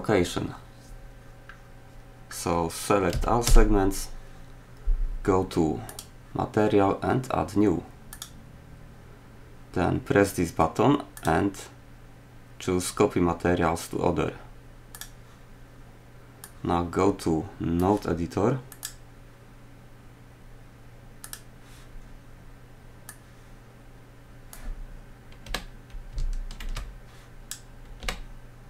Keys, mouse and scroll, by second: 3.1 a, 3.4 a, 17.3 middle click, 23.2 middle click, 25.4 n, 26.7 shift+z, 28.0 n.